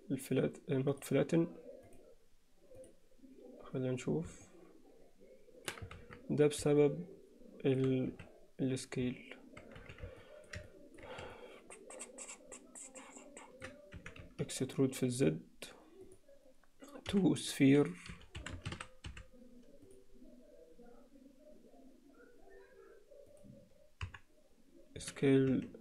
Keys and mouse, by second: 1.8 click, 4.4-5.7 alt+middle drag, 6.2 ctrl+z, 6.8-7.8 alt+middle drag, 8.1 z, 9.8 z, 10.2 alt+middle click, 10.7 ctrl+middle click, 11.4-13.6 ctrl+middle drag, 14.2 e, 17.2 F3, 24.0 KP_1, 25.0 s.